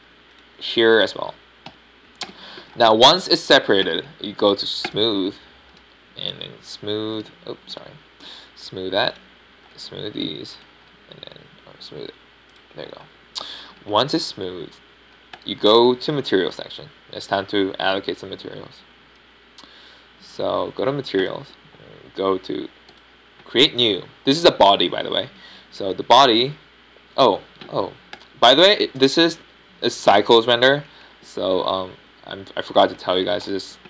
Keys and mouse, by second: 1.6-2.9 middle drag, 3.6 p, 4.8 Tab, 6.8 click, 7.7-8.4 middle drag, 8.4-11.8 right drag, 11.8-15.4 middle drag, 15.1 Tab, 15.9 Tab, 17.3-19.1 right drag, 21.1 click, 21.3 click, 22.2-25.7 drag, 25.7-26.3 middle drag, 27.7-29.6 middle drag, 30.1-32.1 drag, 32.8-33.8 middle drag.